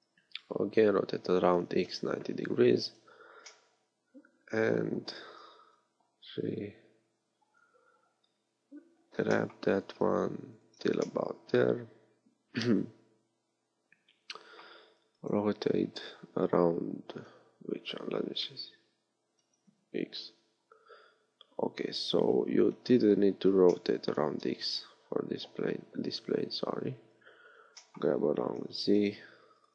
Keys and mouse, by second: 3.7-5.6 middle drag, 5.7 KP_3, 8.9 g, 11.3-12.9 drag, 15.5 r, 23.8-25.9 middle drag, 25.9 KP_1, 27.1 KP_3, 28.6 g.